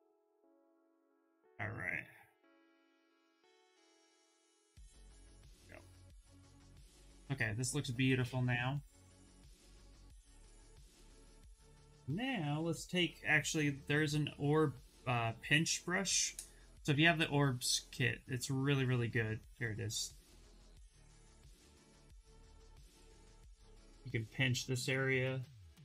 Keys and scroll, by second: 12.1 b, 20.5 s, 25.5 1.